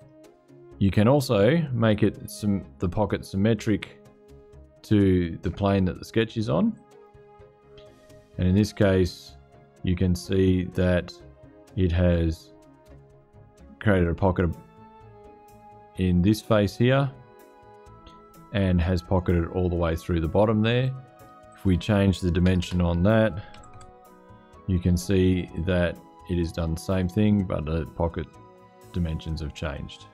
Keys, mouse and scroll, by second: 6.5 click, 8.3-12.3 drag, 16.6-19.2 drag, 21.2 click, 22.2 BackSpace, 23.3 KP_3, 23.5 KP_5, 25.3-26.9 drag.